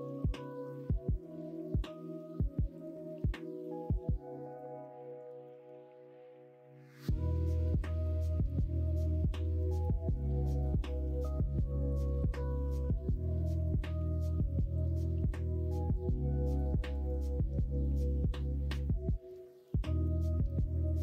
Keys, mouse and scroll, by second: 0.6 alt+s, 5.4 middle click, 7.3 middle click, 8.0 middle click, 8.8 middle click, 9.3 middle click, 9.9 alt+s, 13.1 middle click, 13.9 3, 14.5 middle click, 16.9 click, 18.2 middle click, 18.8 middle click, 19.8 middle click, 19.9 middle click, 20.4 middle click, 20.9 middle click.